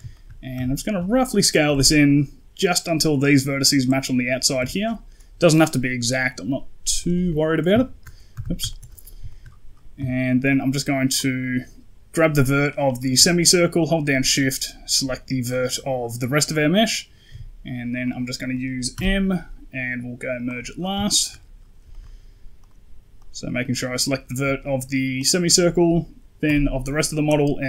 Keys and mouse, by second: 0.0 shift+middle click, 0.4 s, 4.5 s, 7.6 ctrl+shift+middle click, 8.2 KP_1, 8.6 shift+middle click, 9.2 shift+middle click, 9.8 z, 10.4 right click, 11.0 right click, 13.7 shift+right click, 17.2 q, 18.8 m, 20.9 shift+middle click, 21.8 shift+middle click, 22.5 right click, 23.1 right click, 25.0 shift+right click, 26.3 m.